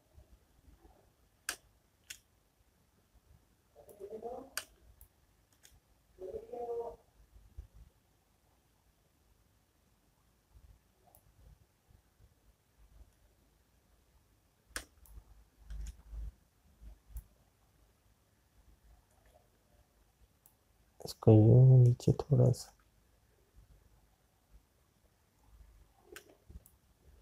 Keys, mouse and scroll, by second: 2.6 space, 12.3 click, 17.5 space, 17.9 click.